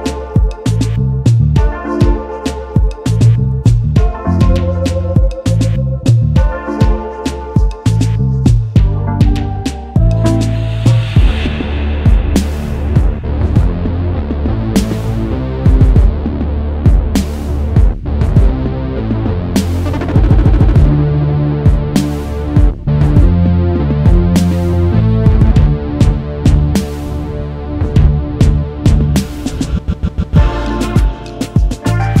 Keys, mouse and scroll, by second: 11.3-13.3 scroll down 1, 14.8 alt+scroll up 1, 18.7 alt+scroll up 2, 27.1 alt+scroll down 1, 29.1 double click, 29.4 alt+scroll down 1, 29.7 alt+scroll up 1, 30.1 space.